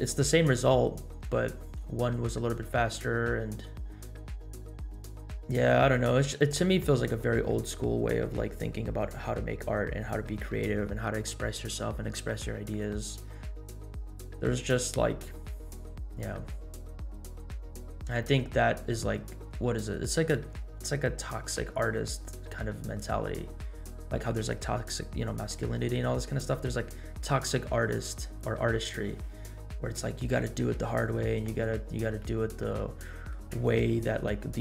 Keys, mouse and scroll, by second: 14.4 scroll down 1, 15.0 scroll down 2, 15.8 scroll up 1, 16.7-17.5 scroll down 3, 18.8 scroll up 1, 19.4-19.8 scroll up 2, 31.4 scroll up 1, 32.8-33.4 shift+middle drag, 34.0 scroll down 1.